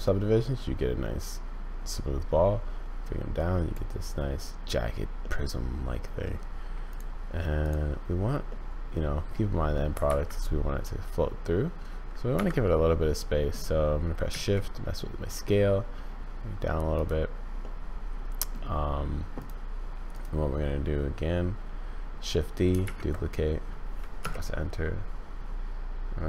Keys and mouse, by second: 3.7 click, 5.3-6.3 drag, 6.9 click, 8.5-9.7 drag, 9.9 g, 12.9 click, 14.3 s, 17.7-18.5 drag, 20.1 click, 22.8 shift+d.